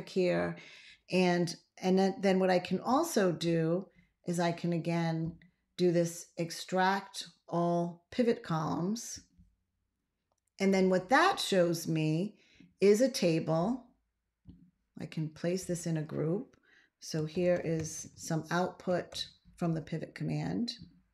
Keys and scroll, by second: 16.9-18.8 typing, 19.0 Return.